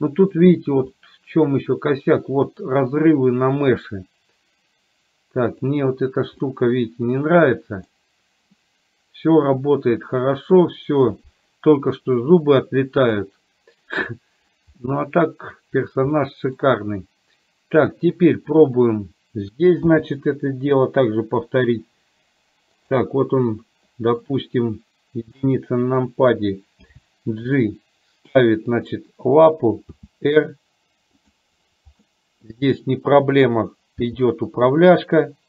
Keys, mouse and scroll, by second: 0.4 click, 1.1-2.7 middle drag, 6.4-8.1 middle drag, 8.7-10.7 middle drag, 13.1 click, 14.8 middle click, 16.3 middle click, 18.8 click, 20.1 g, 23.9 middle click, 25.4 KP_1, 27.1 g, 29.9 r, 32.2 middle click, 34.1 g.